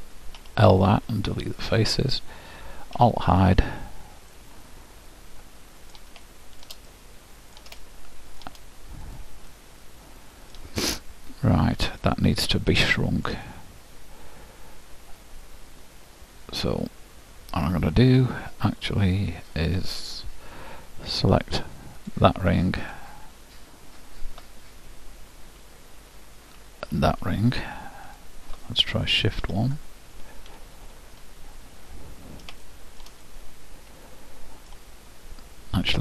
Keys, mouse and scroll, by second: 0.4 l, 1.1 Delete, 3.0 alt+h, 4.4-9.6 middle drag, 9.1-10.9 drag, 10.9-12.8 middle drag, 22.2-24.7 drag, 28.3-29.8 drag, 32.7-35.2 middle drag.